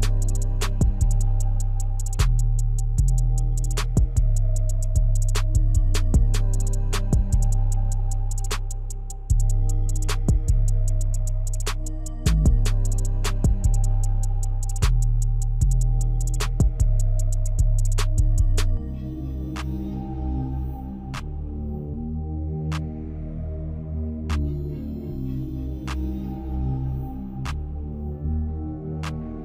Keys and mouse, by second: 0.7 Tab, 2.1 ctrl+r, 5.1 ctrl+r, 8.3 Tab, 9.2-11.5 middle drag, 11.8 Tab, 14.6 ctrl+r, 18.8 Tab, 20.6-22.1 middle drag, 22.8 KP_1, 24.6-25.3 shift+middle drag.